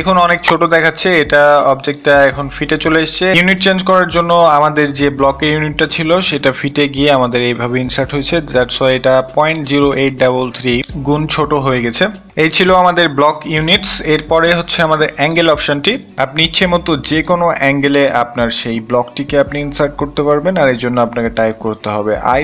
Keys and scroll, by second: 18.6 i, 18.8 Return, 21.7-22.4 typing.